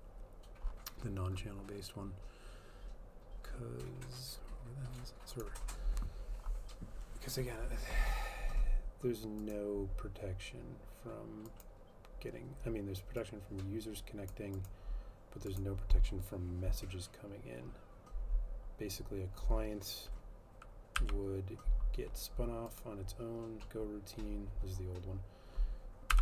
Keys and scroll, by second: 21.1 F12.